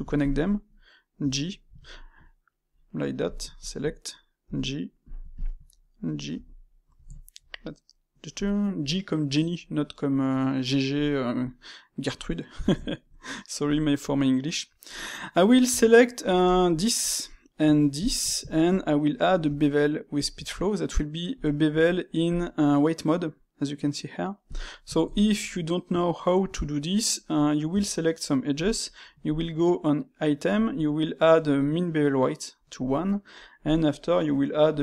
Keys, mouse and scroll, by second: 0.1 shift+click, 1.1 j, 1.4-2.7 middle drag, 2.7 click, 3.2 click, 4.4 j, 5.3 shift+click, 6.2 j, 6.6-15.6 middle drag, 15.6 Tab, 16.3 alt+click, 17.0-17.9 middle drag, 17.9 alt+shift+click, 18.4-19.3 shift+middle drag, 19.3 space, 24.9-27.6 ctrl+shift+middle drag, 27.6 Tab, 29.2 click, 33.5 click, 34.6 click.